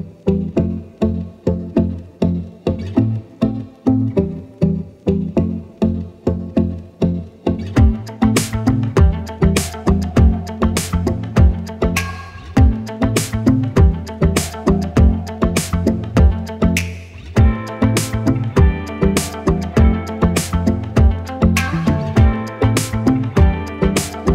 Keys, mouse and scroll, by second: 0.6 click, 5.3 click, 12.0 click.